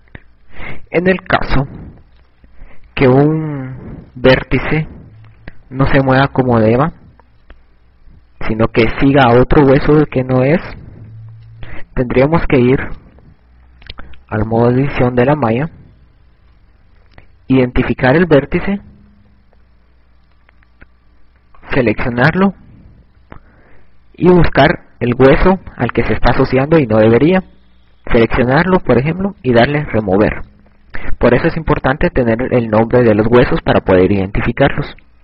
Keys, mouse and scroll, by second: 0.3 a, 4.8 a, 5.3 ctrl+Tab, 7.8 a, 9.8 KP_Add, 12.6 KP_Add, 13.8 right click, 14.8 Tab, 17.4 z, 18.4 KP_Add, 19.4 KP_Add, 19.8 KP_Add, 20.0 KP_Add, 20.2 KP_Add, 29.2 click, 33.4 click.